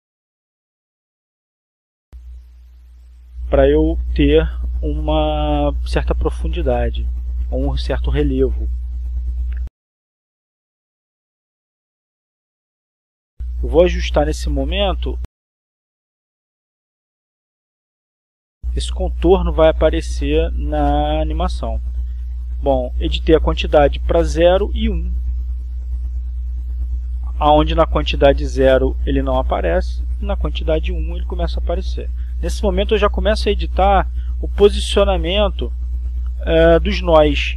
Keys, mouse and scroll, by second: 3.1 click, 4.3 click, 5.8 click, 8.1 click, 9.8 click, 11.8-17.6 drag, 18.7 click, 19.8 click, 21.0 click, 21.7 click, 22.5 0, 22.8 Return, 24.1 click, 26.3 1, 26.7 Return, 28.7 click, 33.6-35.5 drag.